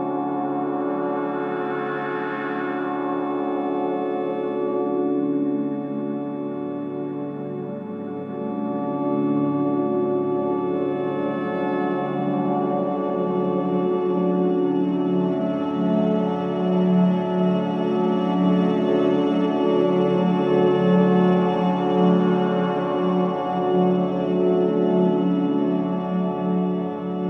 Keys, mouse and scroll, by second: 1.7-2.5 scroll up 1, 4.1 click, 4.6-4.9 scroll down 1, 7.9 scroll up 1, 13.8 click, 14.1-14.9 scroll down 1, 14.9-15.4 scroll up 1, 15.4-15.8 scroll down 1, 16.4 click, 18.2 scroll up 1, 19.3-19.7 typing, 21.7-22.5 scroll down 1.